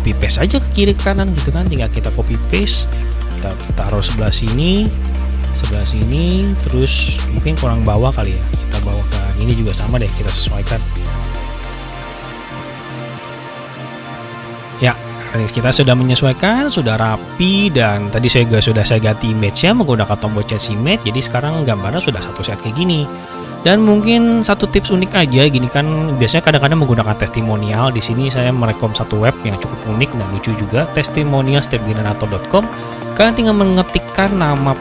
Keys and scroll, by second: 2.8 ctrl+c, 3.2 ctrl+v.